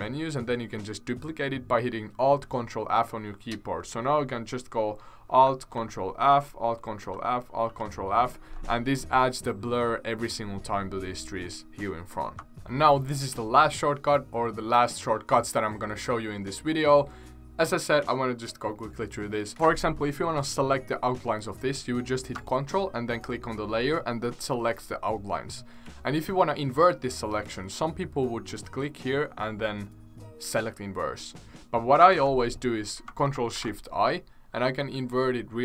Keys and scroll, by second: 6.3 ctrl+alt+f, 7.0 ctrl+alt+f, 7.6 ctrl+alt+f, 32.1 ctrl+z, 33.5 ctrl+shift+i.